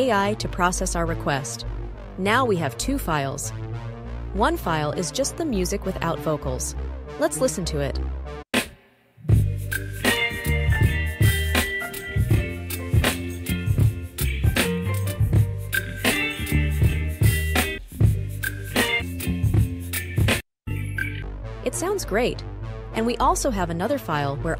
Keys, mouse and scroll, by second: 4.7 scroll down 1, 5.0 scroll, 5.2-7.9 scroll down 3, 8.3 click, 17.6-18.9 drag.